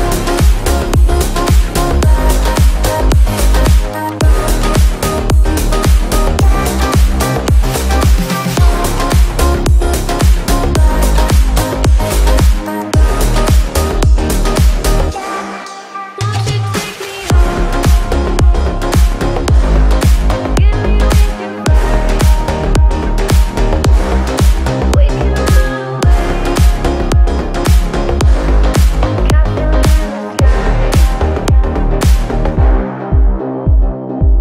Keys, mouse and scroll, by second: 2.1 shift+middle click, 2.6 scroll down 1, 2.9 space, 3.3 shift+middle click, 3.7-4.7 scroll up 1, 4.7 click, 8.5-8.8 scroll up 1, 11.6 click, 14.3 scroll down 1, 14.9 shift+middle click, 15.2 scroll up 1, 16.0 click, 16.4 scroll down 1, 18.7-22.6 drag, 22.6-23.4 scroll up 1, 23.4 click, 25.4 space, 27.3-33.2 drag, 33.2 space, 33.3 scroll down 1, 33.9 space, 34.1-34.4 scroll up 1.